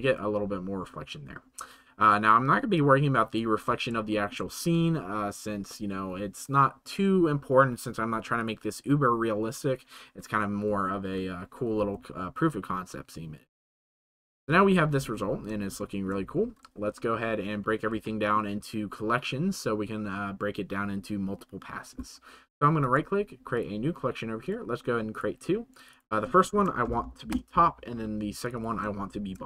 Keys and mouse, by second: 2.8 right click, 4.0 shift+middle drag, 8.4 middle click, 13.9 c, 14.2 space, 15.8 shift+middle click, 22.8-23.6 drag, 24.5 click, 25.9-27.1 middle drag, 27.1 click, 28.4 click, 28.8-29.4 shift+drag.